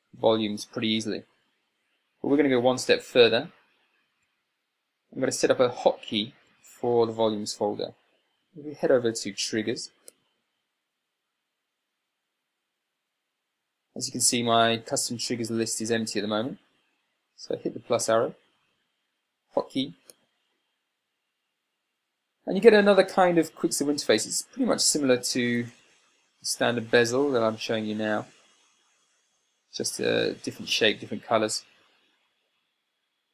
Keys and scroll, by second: 4.7 Escape, 6.9 Escape.